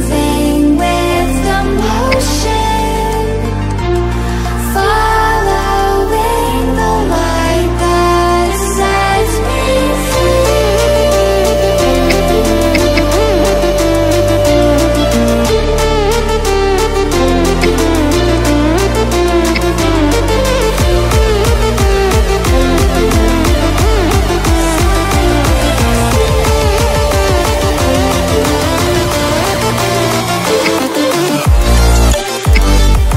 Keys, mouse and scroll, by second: 2.0 ctrl+alt+b, 3.0-4.1 drag, 12.0-13.3 typing, 13.6 click, 17.5 t, 18.3 click, 19.4 shift+z, 20.7 click, 21.8-22.8 shift+drag, 25.3 right click, 26.2 click, 26.6 right click, 27.4 click, 30.5 a, 31.4 click, 32.4 Delete.